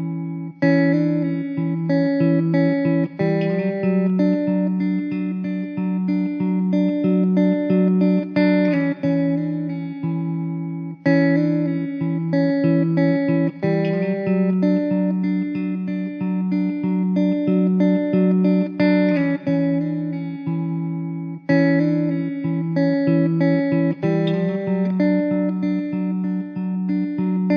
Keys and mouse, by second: 0.0 alt+w, 0.6 middle click, 9.5-10.4 typing, 12.3 1.